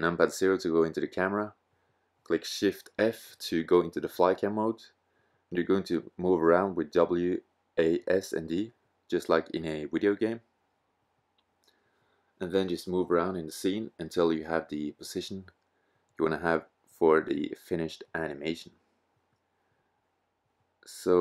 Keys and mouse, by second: 2.5 shift+f, 6.7-11.8 middle drag.